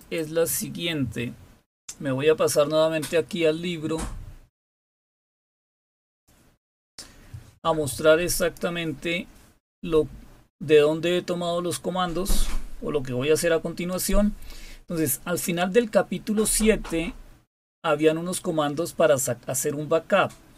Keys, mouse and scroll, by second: 0.0 click, 6.0 click, 8.3 click, 9.0 click, 10.2-11.3 scroll down 7, 11.8-13.4 scroll down 7, 13.8 click, 18.0 scroll down 2, 18.7 scroll down 2, 19.5 scroll down 2, 20.1-20.5 scroll down 2.